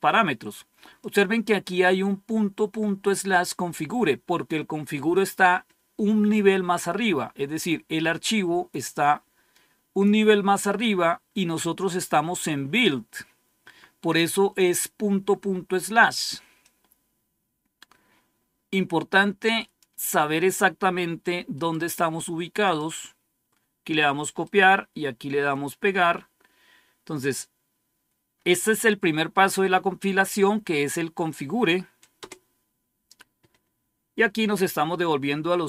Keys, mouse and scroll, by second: 0.9 click, 8.6-10.0 drag, 10.7 click, 16.5-20.4 drag, 21.6 right click, 22.5 click, 24.3-25.4 right drag, 25.4 click, 29.4 Tab, 32.1 Return.